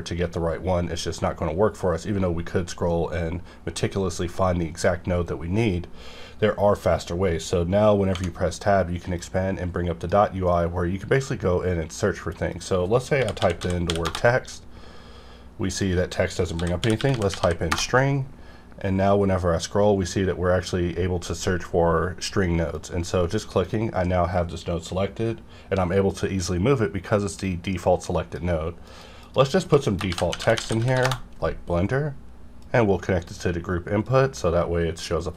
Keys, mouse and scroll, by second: 0.1 scroll down 1, 0.9 scroll down 1, 1.8-3.4 scroll down 4, 4.0 scroll down 1, 4.6 scroll down 1, 9.2-12.3 drag, 12.5 click, 13.2-13.9 typing, 14.0 Return, 15.7 click, 16.5-17.4 typing, 17.7 Return, 18.7-19.8 scroll up 1, 19.8-20.3 scroll down 1, 20.3-22.1 scroll up 1, 22.7-28.9 drag, 30.1-30.9 typing, 31.0 Return, 32.6-34.1 drag, 34.1 click.